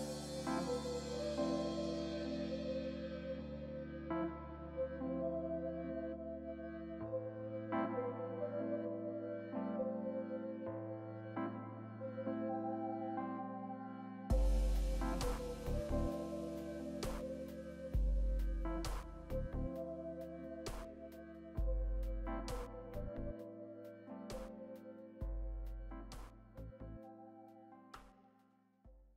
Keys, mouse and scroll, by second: 0.9 scroll down 2, 1.7 scroll up 2, 2.4-5.9 scroll down 1, 8.8 middle click, 9.8-11.4 scroll down 2, 11.8 scroll up 1, 12.1 middle click, 19.4 scroll down 1, 28.3 right click.